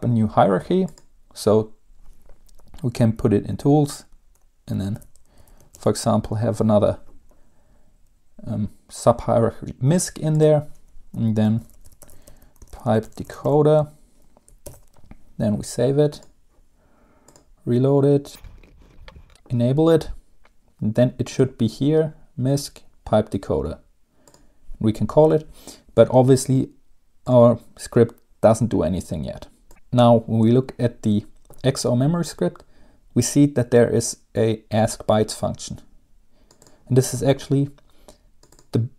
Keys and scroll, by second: 5.3-6.9 typing, 11.7-14.1 typing, 14.8 ctrl+s, 18.4-19.9 typing.